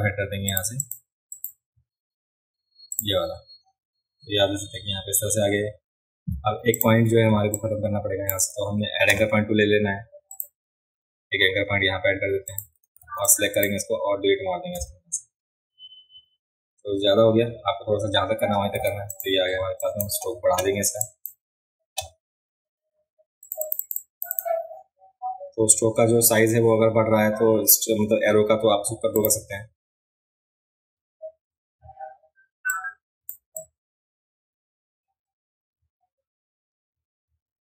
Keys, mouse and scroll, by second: 0.5 click, 0.8 click, 1.3 click, 2.9 click, 6.7 click, 7.3 space, 7.6 click, 10.3 click, 12.5 click, 13.0 a, 13.3-13.6 drag, 18.8 v, 19.1 click, 19.8 drag, 21.0 drag, 23.4 click, 23.6 click, 24.3 click, 29.2 click, 32.7 click, 33.6 click.